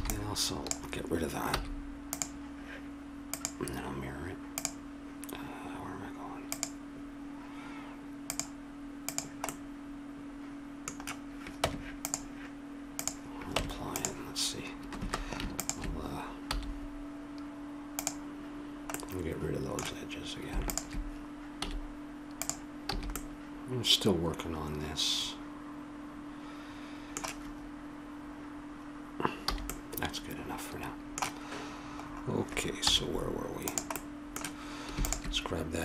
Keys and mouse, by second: 0.0 b, 1.7 x, 3.3-5.3 drag, 6.5-11.0 drag, 9.5-10.7 middle drag, 11.6 Tab, 13.0-14.8 drag, 13.5 Tab, 15.5-17.0 drag, 16.5 x, 18.9-20.1 middle drag, 20.7-22.5 drag, 21.7 x, 22.8 a, 23.2 middle click, 29.5 a, 29.7-31.3 middle drag, 32.0-33.9 middle drag, 32.9 z, 35.0-35.8 drag.